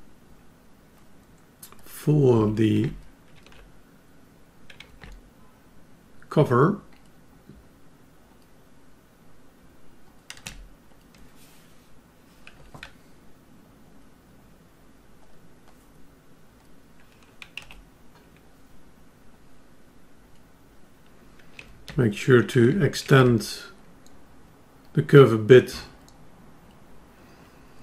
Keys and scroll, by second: 18.1 F10.